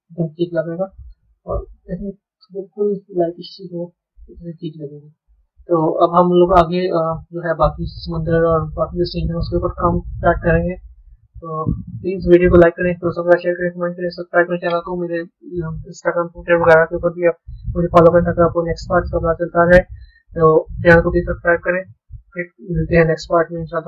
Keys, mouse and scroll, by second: 0.0-1.2 middle drag, 1.2 click, 4.0-5.6 middle drag, 5.6 scroll up 4, 6.6-8.5 middle drag, 12.3-14.4 middle drag, 15.0-18.1 scroll down 2.